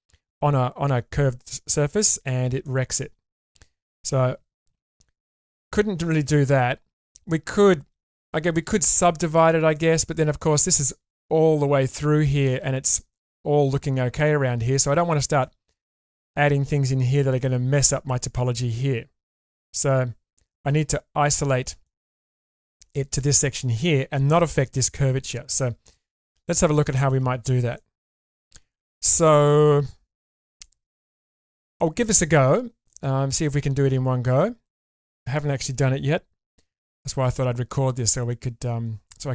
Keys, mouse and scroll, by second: 2.6 middle click, 4.1 ctrl+z, 5.1 scroll down 1, 5.4-6.4 middle drag, 7.0 middle click, 9.4-10.0 scroll down 2, 9.7-12.4 middle drag, 13.9-14.2 scroll up 2, 14.2 middle click, 15.4 middle click, 16.8 middle click, 18.3-19.6 scroll down 2, 18.7-20.7 middle drag, 21.0-21.4 scroll up 2, 21.4 middle click, 21.8 shift+middle click, 22.3-24.1 scroll up 3, 25.0 scroll down 2, 25.3 middle click, 26.4-26.8 scroll up 2, 26.9 shift+middle click, 27.8-28.8 middle drag, 30.3 scroll up 2, 30.6 middle click, 31.4 shift+middle click, 31.8 middle click, 32.5-32.8 scroll down 2, 32.8 middle click, 33.8-34.4 scroll up 1, 34.4 middle click, 34.4 scroll up 1, 36.5 k.